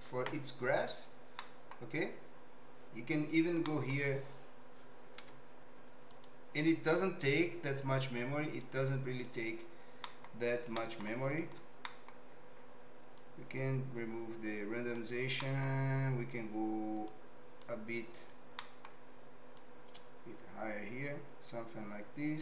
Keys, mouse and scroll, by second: 1.3 middle click, 2.0 Escape, 3.8 middle click, 5.1 z, 10.0 middle click, 10.8 middle click, 11.9 middle click, 13.1-14.9 drag, 15.4 middle click, 17.2-18.4 drag, 18.7 middle click, 19.7-22.4 shift+drag.